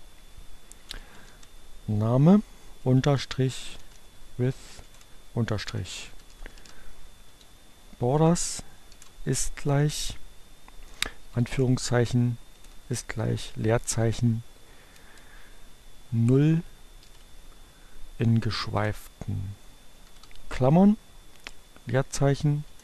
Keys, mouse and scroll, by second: 0.6-1.7 typing, 3.2-7.3 typing, 8.8 shift+0, 9.8 space, 11.2 shift+2, 12.5 shift+0, 13.5 space, 16.4 alt+7, 18.8 0, 21.5 space, 21.9 shift+0.